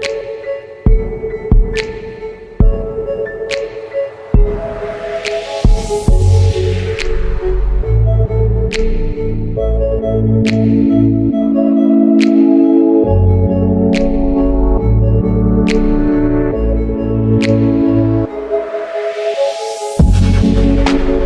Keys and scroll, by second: 0.6 typing, 7.9 super+i, 8.1 super+b, 8.2 space, 16.6-17.0 typing, 19.8 alt+shift+super+e.